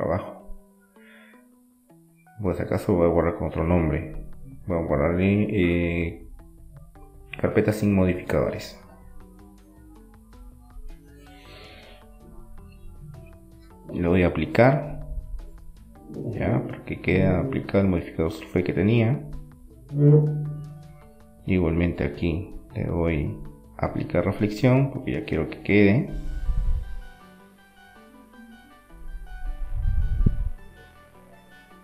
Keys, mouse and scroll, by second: 0.0 Return, 2.4-4.4 middle drag, 5.6 middle click, 6.3-8.4 drag, 8.1 Tab, 10.7-12.8 middle drag, 12.3 Tab, 13.7-15.7 middle drag, 16.3-17.6 drag, 17.6-19.7 middle drag, 24.3-27.0 middle drag, 29.0-30.6 drag, 30.0 middle click, 31.0-31.8 drag.